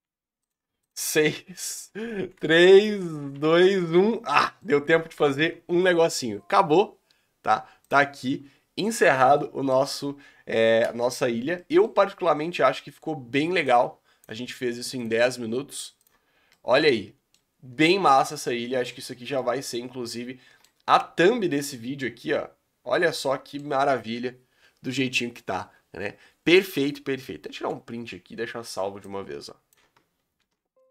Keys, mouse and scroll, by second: 0.9 click, 1.7 l, 2.3 r, 2.9 g, 3.3 Tab, 3.5 scroll down 3, 3.6-4.1 middle drag, 4.1-5.8 scroll down 8, 4.3-4.8 middle drag, 5.2 alt+a, 9.2-10.0 middle drag, 10.0 scroll down 2, 11.0 ctrl+space, 11.6-15.1 middle drag, 16.1 click, 16.4 scroll down 3, 16.5-17.5 middle drag, 17.5-17.9 scroll up 2, 17.9-22.5 shift+middle drag, 22.5-23.1 scroll up 1, 23.1-27.7 shift+middle drag, 29.3-30.9 middle drag.